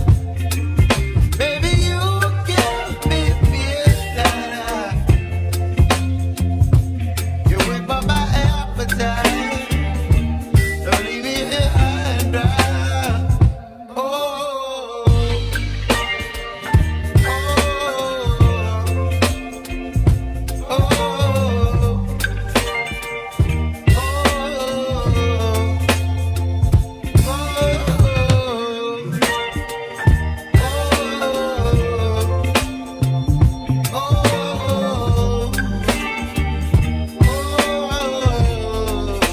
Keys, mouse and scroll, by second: 3.4-8.9 shift+drag, 8.9-11.1 middle drag, 11.1 g, 15.6-18.1 middle drag, 19.2 right click, 20.1 Tab, 20.5-22.0 right drag, 22.0-22.4 scroll down 1, 22.4 Tab, 23.1-25.6 middle drag, 27.9 /, 30.9-31.3 scroll down 1, 31.3-32.4 shift+middle drag, 34.1-39.3 drag.